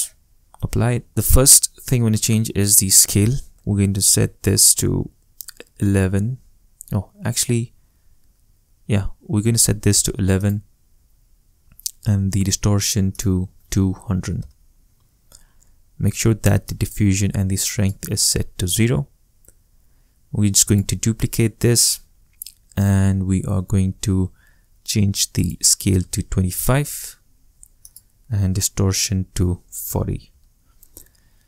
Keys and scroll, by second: 5.8 l, 13.3 2, 14.0 0, 14.4 Return, 26.0 2, 26.4 5, 27.0 Return, 29.4 4, 29.8 0, 30.3 Return.